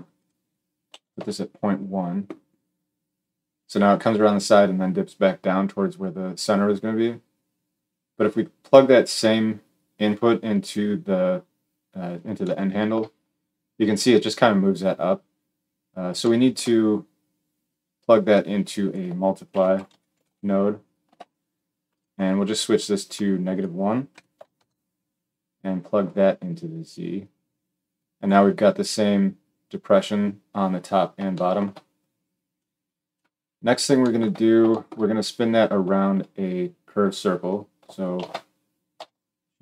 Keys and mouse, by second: 21.9-23.4 middle drag, 23.4-39.6 drag, 38.1 shift+a.